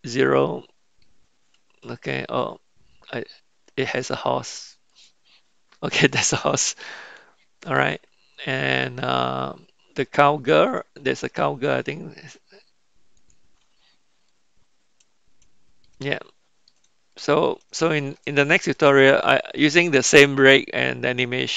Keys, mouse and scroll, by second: 0.4-2.2 middle drag, 5.0 click, 6.1-9.2 middle drag, 13.3 click, 14.3-15.8 middle drag, 16.6-17.7 shift+middle drag, 17.9-18.4 shift+middle drag, 18.8 middle click, 19.4-21.2 shift+middle drag.